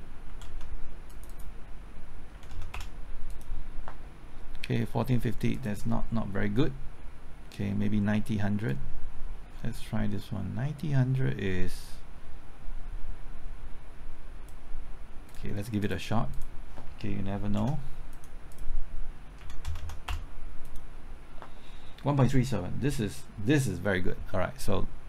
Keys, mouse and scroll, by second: 0.2 KP_5, 0.4 KP_0, 1.1 click, 2.3 KP_6, 2.5 KP_0, 2.7 KP_Enter, 3.3-15.2 drag, 17.4 KP_9, 17.5 KP_0, 18.1 click, 19.4 KP_1, 19.6 KP_0, 20.1 KP_Enter, 20.6-25.0 drag.